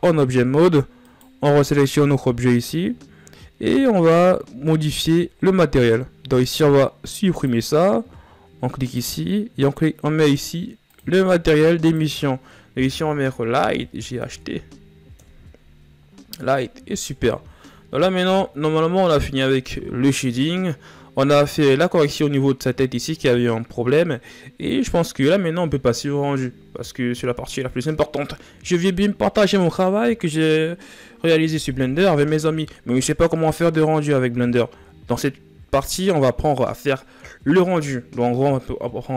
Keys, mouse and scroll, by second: 7.0-16.4 drag, 16.4-17.4 scroll down 6, 16.7 a, 17.4 shift+z, 18.3 shift+z, 21.0 scroll up 1.